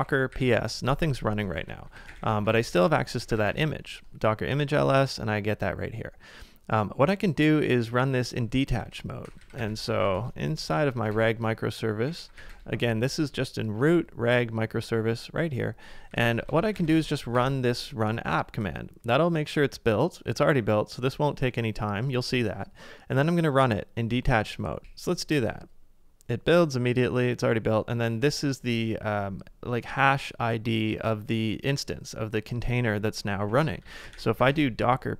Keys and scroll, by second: 0.0-3.9 typing, 8.8-10.5 typing, 11.8-12.9 typing, 15.9-17.5 typing, 24.8 typing, 33.2-34.9 typing.